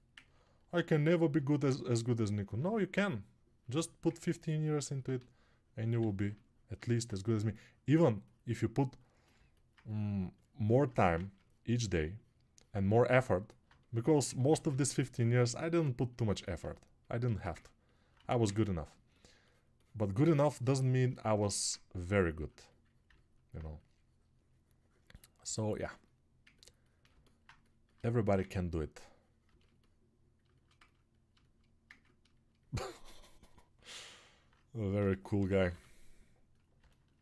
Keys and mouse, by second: 0.4 alt+right click.